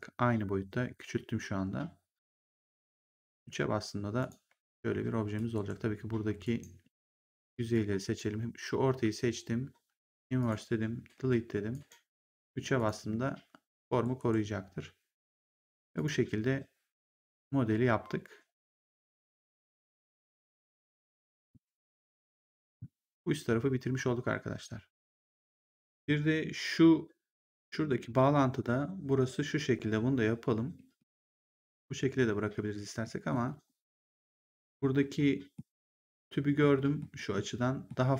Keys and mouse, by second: 3.3 3, 4.1 click, 4.4 3, 4.9 1, 5.4 ctrl+1, 6.3 right click, 7.6 click, 10.3 click, 11.1 Delete, 11.6 right click, 12.4 3, 12.6 click, 14.1 ctrl+1, 15.8 click, 20.8 click, 25.8 click, 27.3 click, 30.9 middle click, 32.9 middle click, 35.1 middle click.